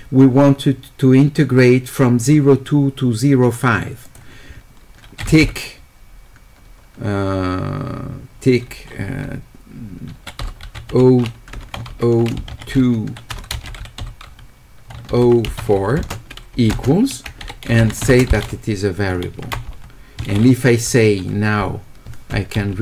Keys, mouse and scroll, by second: 4.1 click, 16.0-18.5 typing.